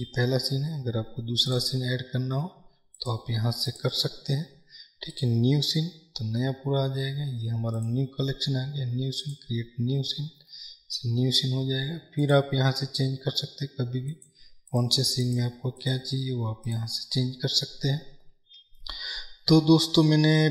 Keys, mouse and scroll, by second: 3.0-7.8 drag, 9.3-11.1 drag, 11.1-14.1 middle drag, 14.1-20.5 drag.